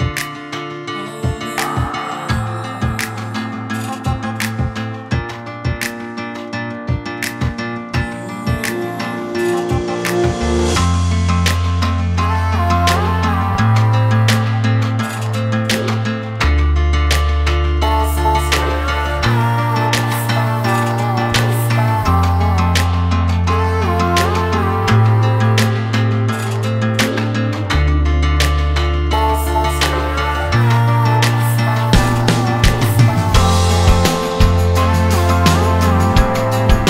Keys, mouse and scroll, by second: 0.1 click, 0.6 scroll up 1, 1.3-3.4 drag, 6.4-6.8 scroll down 1, 7.3 click, 7.7 click, 8.0-8.7 scroll down 2, 8.7 click, 8.9-9.4 scroll down 2, 9.4-10.2 drag, 10.2-12.2 scroll down 1, 12.2-13.0 scroll down 9, 13.0-13.5 scroll up 10, 14.8 click, 16.0-17.6 drag, 18.3 click, 19.6-23.3 drag, 25.3 click, 26.2 click, 27.2 click, 27.8-36.4 drag.